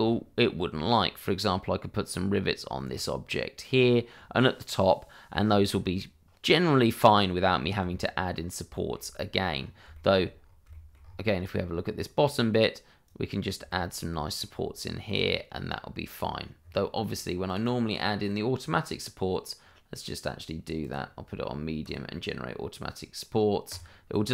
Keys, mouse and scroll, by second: 0.0 scroll up 1, 2.9 shift+middle click, 5.2-5.6 scroll down 1, 7.5 scroll down 1, 7.9 shift+middle click, 9.5-9.8 scroll up 1, 9.9 shift+middle click, 10.3-10.6 shift+scroll up 2, 13.0 right click, 13.6 shift+middle click, 16.5-17.4 scroll down 1, 17.4 right click, 20.8 click.